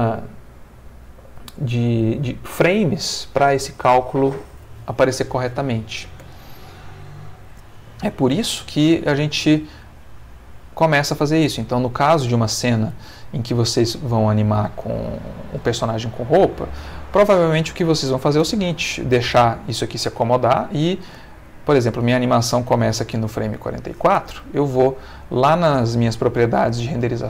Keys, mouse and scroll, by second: 6.2 Escape, 7.5 ctrl+z, 9.8 ctrl+z, 10.6 ctrl+z, 11.3 ctrl+z, 12.2 ctrl+z, 12.9 ctrl+z, 14.6 ctrl+z, 16.2-18.6 drag, 19.6-21.2 drag, 21.5-23.2 drag, 25.4 click, 26.5 click.